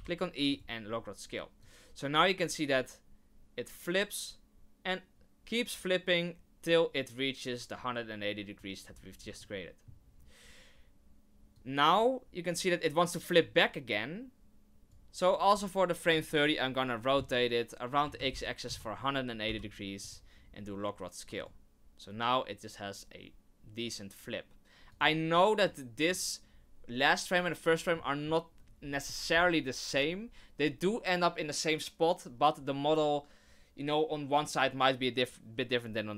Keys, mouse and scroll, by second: 1.6 click, 9.1 scroll down 1, 9.4 shift+middle click, 11.5 click, 16.1 r, 19.4 i, 21.3 click, 24.9 click, 25.6 click, 28.0 middle click, 28.3-28.6 scroll down 2.